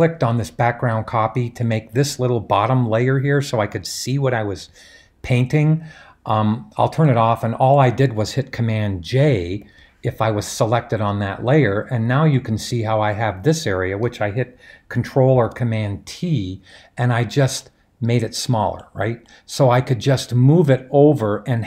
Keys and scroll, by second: 9.5 super+j, 15.4 super+t.